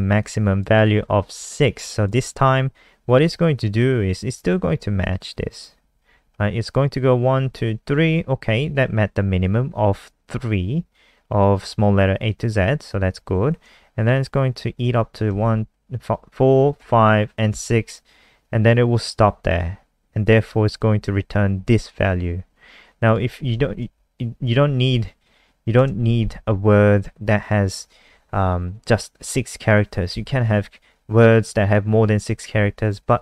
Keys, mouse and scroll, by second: 15.2 shift+Right, 23.0 click, 23.7 Up, 23.9 Down, 24.4 click, 30.0 BackSpace.